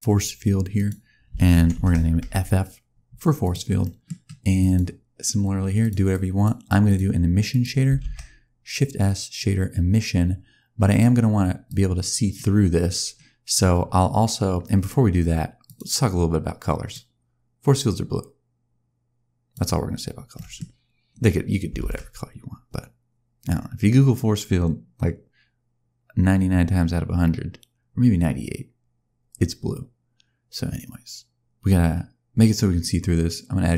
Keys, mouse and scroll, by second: 0.6 click, 1.6 shift+f, 3.3 click, 3.7 middle click, 4.5 click, 5.7 click, 6.0 click, 6.8 click, 7.4 click, 7.9 shift+s, 11.6 click, 12.9-13.4 scroll up 2, 13.4 scroll down 2, 13.7-14.9 scroll up 2, 15.5 click, 20.2 middle click, 20.5-21.6 scroll down 1, 21.7 shift+a.